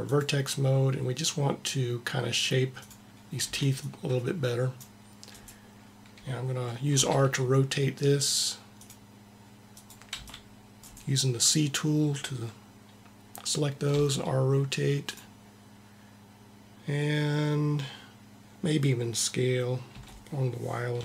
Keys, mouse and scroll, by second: 0.0-4.7 drag, 3.8 c, 6.9 r, 9.7-11.4 drag, 10.1 c, 13.9 r, 15.2-16.9 drag, 19.9 s.